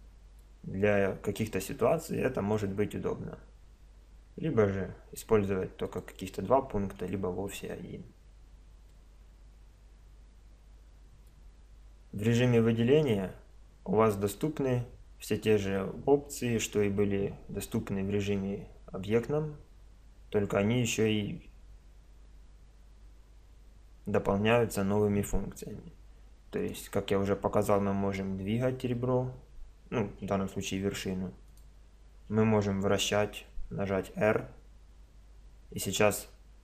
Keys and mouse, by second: 5.9-8.8 drag, 8.9-11.6 middle drag, 26.6-27.6 right drag, 27.6-29.2 middle drag, 29.2 click, 31.5-33.4 right drag, 33.5 r.